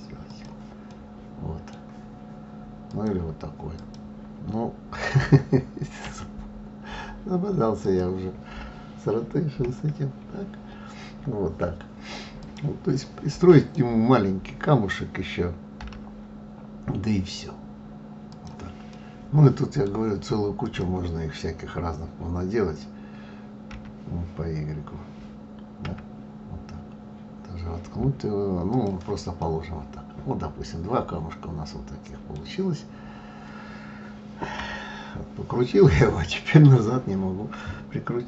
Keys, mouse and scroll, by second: 0.9-2.8 middle drag, 2.8 click, 3.7 click, 6.1 r, 9.6 KP_1, 11.4-12.4 scroll up 1, 12.4 click, 13.6 click, 15.8 g, 18.9-20.6 middle drag, 20.6 click, 23.7 g, 29.4-32.4 middle drag, 34.6 KP_3.